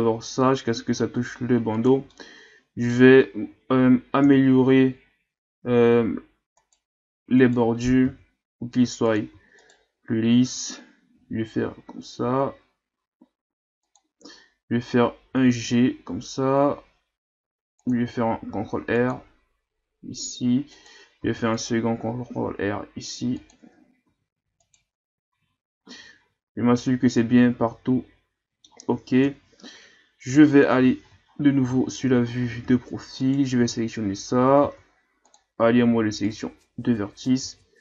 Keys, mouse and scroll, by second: 2.1-4.3 middle drag, 4.3 KP_3, 5.8-6.6 ctrl+scroll up 2, 6.6 alt+right click, 7.4 alt+right click, 8.0 ctrl+Tab, 9.6 alt+right click, 11.1 g, 15.3 g, 18.5 ctrl+r, 21.2 ctrl+r, 23.6 Tab, 24.0 a, 24.6 right click, 25.3 a, 25.5-25.9 scroll down 3, 25.9-29.2 middle drag, 29.2 KP_1, 30.6 KP_3, 31.3-31.7 shift+scroll up 5, 31.7-32.1 scroll down 1, 32.1-33.2 scroll up 8, 33.2 right click, 33.6 Tab, 34.0-34.6 scroll up 1, 34.6 ctrl+Tab, 36.2 right click, 37.4 ctrl+z.